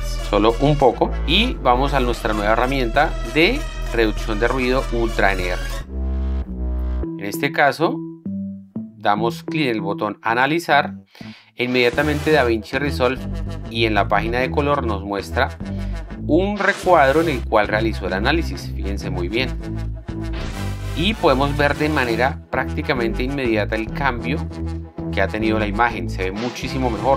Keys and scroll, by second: 0.0 6, 0.2 Return, 7.7 z.